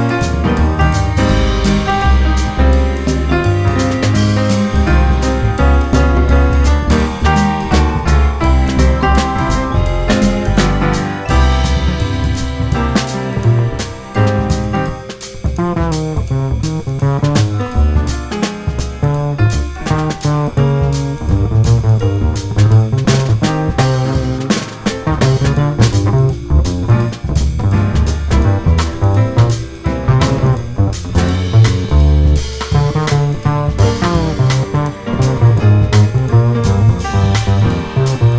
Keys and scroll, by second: 1.5 F4, 2.4 F4, 3.0 F4, 8.8 F4, 11.1 F4, 11.8 F4, 12.4 F4, 14.6 2, 17.4 4, 21.9 F4, 23.1 F4, 24.4 F4, 31.9 F4, 33.5 F4, 34.8 2, 37.0 F3, 37.8 4.